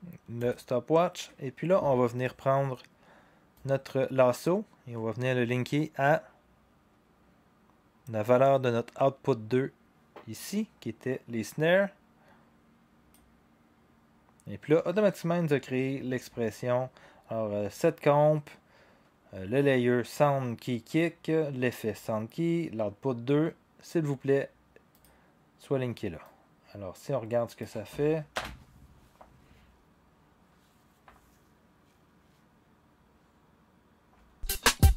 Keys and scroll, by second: 28.3 0, 34.1 0.